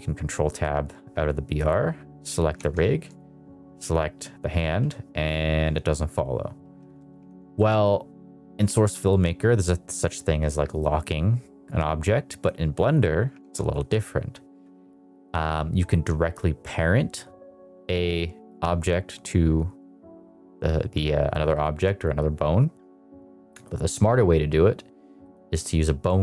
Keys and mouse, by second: 1.5 click, 2.5 ctrl+Tab, 4.5 g, 6.5 Escape, 7.2 ctrl+Tab, 7.5 middle click, 12.8 click, 13.3 ctrl+Tab, 13.7 click, 23.5 click, 25.2-26.1 drag.